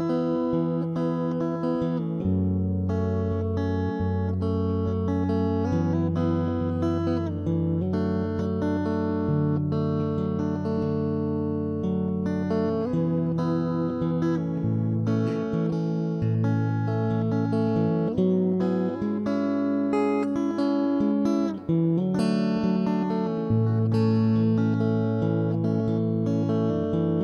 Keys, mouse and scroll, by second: 0.1 ctrl+0, 0.1 middle click, 0.2 click, 0.6-1.7 right drag, 1.3-2.8 middle drag, 3.0 ctrl+,, 3.2 s, 4.3 middle click, 4.9 right click, 5.4 ctrl+KP_3, 5.8 right click, 6.0-8.7 middle drag, 6.5 right click, 6.9 right click, 8.8 ctrl+KP_3, 8.8 middle click, 9.3 s, 10.2 middle click, 10.6 z, 10.8 ctrl+3, 10.9 middle click, 12.0-14.6 middle drag, 14.0 ctrl+s, 14.4 Tab, 14.8 alt+h, 14.8 middle click, 15.4 right click, 15.9 shift+h, 16.0 Tab, 16.0 middle click, 16.7 ctrl+r, 17.3 middle click, 17.5 ctrl+KP_3, 17.6 middle click, 17.8 z, 18.5 ctrl+0, 18.7 middle click, 20.6 ctrl+r, 21.2 ctrl+KP_3, 21.3-23.1 middle drag, 22.6 right click, 23.0 shift+d, 23.6 p, 23.8 middle click, 24.6 right click, 24.8 p, 25.0 middle click, 25.7 a, 25.8 Tab, 25.9 right click, 26.1 middle click, 26.5 ctrl+s, 26.7 middle click, 27.0 Tab.